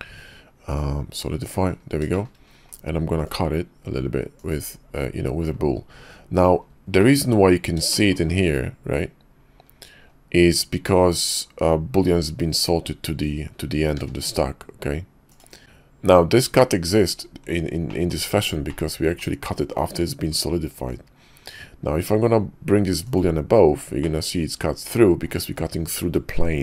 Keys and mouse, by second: 2.1 shift+middle click, 2.7-4.5 drag, 7.0 click, 7.9 shift+middle drag, 14.0 q, 15.6 ctrl+z, 18.7 middle click, 23.2 click, 24.1-25.3 middle drag.